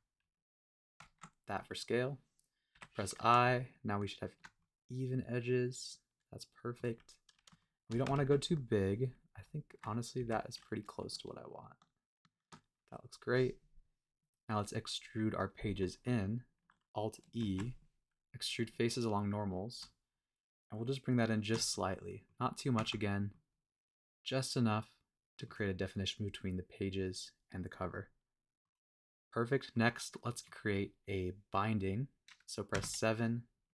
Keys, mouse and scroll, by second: 1.0 Tab, 1.6 middle click, 4.4 shift+click, 4.5-6.9 middle drag, 7.0-7.4 scroll up 2, 7.6 shift+middle click, 8.1 super+z, 12.4 shift+click, 14.0-15.4 scroll down 1, 17.3 alt+e, 21.4 shift+click, 21.7 middle click, 22.4 scroll up 2, 22.7 Tab, 23.3-25.5 middle drag, 27.8-28.6 middle drag, 28.8 scroll down 1, 29.1-29.7 middle drag, 29.9-30.2 scroll down 1, 30.2 middle drag, 32.7 KP_7, 33.6-33.7 scroll up 2.